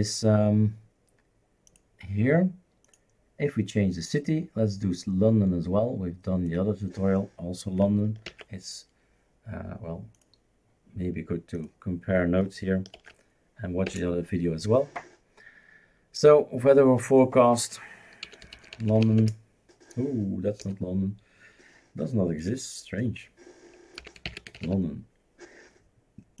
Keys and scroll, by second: 8.3 ctrl+c, 13.0 ctrl+v, 13.9 Return, 18.0-19.5 typing, 20.6 BackSpace, 23.7-25.3 typing.